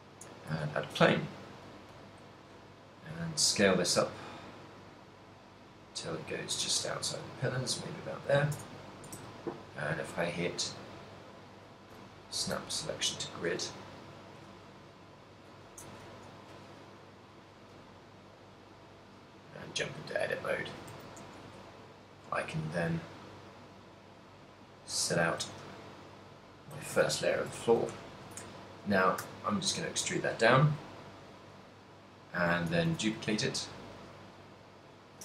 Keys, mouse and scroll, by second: 0.9 s, 2.5 click, 3.4 s, 7.9 click, 8.8 Tab, 9.4 shift+s, 13.0 a, 13.6 right click, 14.1 shift+right click, 14.3 shift+right click, 14.6 g, 15.9 click, 16.1 a, 16.5 b, 17.7 g, 21.0 click, 21.1 a, 21.5 b, 23.0 g, 25.4 click, 26.0 middle click, 26.0 z, 26.8 a, 27.3 a, 27.8 ctrl+middle click, 28.1 shift+middle click, 29.3 e, 31.1 click, 32.8 a, 33.0 a, 33.4 shift+d, 34.3 right click.